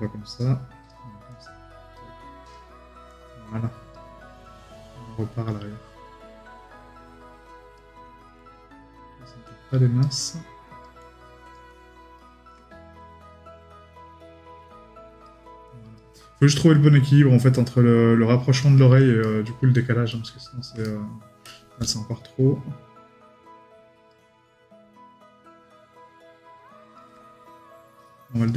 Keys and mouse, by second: 19.2 right click.